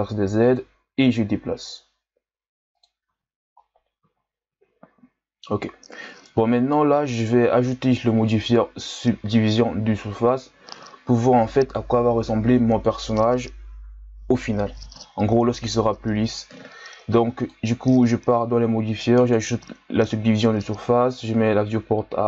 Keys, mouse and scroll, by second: 0.8 g, 3.1 z, 3.6-4.1 scroll down 2, 4.1-5.0 ctrl+scroll up 1, 5.0-5.6 scroll up 3, 5.6-6.4 scroll down 2, 6.4-7.3 ctrl+scroll down 2, 7.3 Tab, 19.3-20.3 drag, 21.1-22.2 drag.